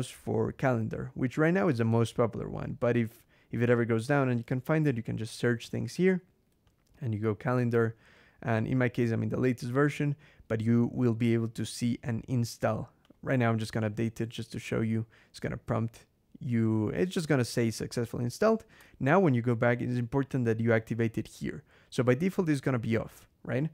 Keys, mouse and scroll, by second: 2.6 click, 3.8-5.1 typing, 6.5 click, 12.9 click, 18.6 Escape, 19.6-20.0 scroll down 2.